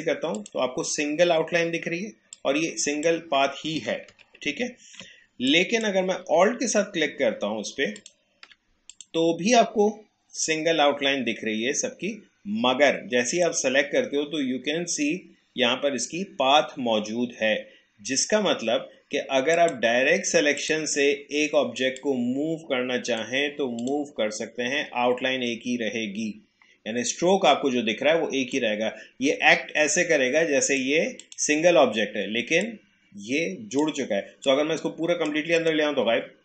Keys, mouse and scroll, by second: 4.1 ctrl+z, 5.5-8.0 drag, 13.3 click, 19.5-23.8 drag, 28.5-36.4 drag.